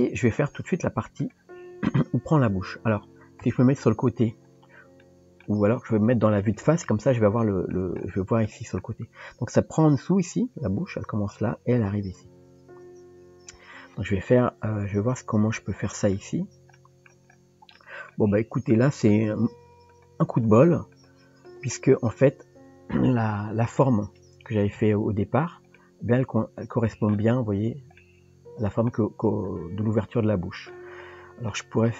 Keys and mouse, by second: 0.0 middle click, 3.4 KP_3, 5.0 shift+middle click, 6.6 KP_1, 7.4 shift+middle click, 8.5 shift+middle click, 16.7 shift+middle click, 17.8 shift+middle click, 19.1 click, 19.9 shift+click, 20.5 shift+click, 20.9 shift+click, 21.5 shift+click, 22.0 shift+click, 23.1 middle click, 24.7 KP_Decimal, 25.7-27.1 middle drag, 28.0 middle click, 30.0 middle click, 31.5-31.9 middle drag.